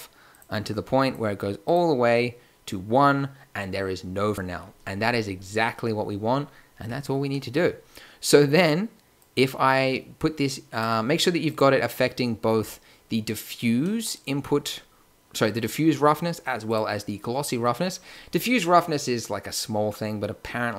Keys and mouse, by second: 3.5-9.2 middle drag, 9.2-10.7 drag, 11.1-13.5 drag, 14.0-18.3 drag.